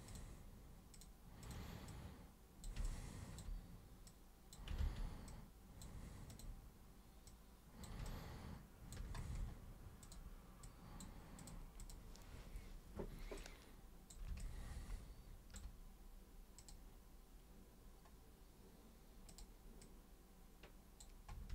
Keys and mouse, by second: 0.0 super+click, 0.9 super+click, 1.4 super+click, 1.8 super+click, 2.8-3.3 alt+super+drag, 4.0 super+click, 4.7 ctrl+super+z, 5.2 super+click, 6.3 super+click, 7.2 super+click, 8.0 alt+super+click, 10.0 super+click, 10.6 super+click, 11.3 super+click, 11.8 super+click, 13.3 super+click, 14.3-15.5 alt+super+drag, 16.6 super+click, 19.3 super+click, 19.8 super+click.